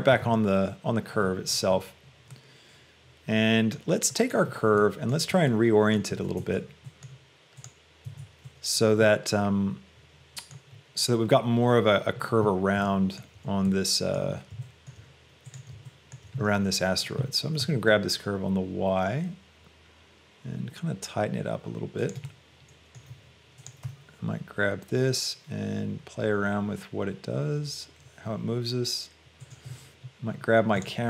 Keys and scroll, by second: 0.4 Return, 6.6 shift+Tab, 8.1 Tab, 17.6 g, 18.0 y.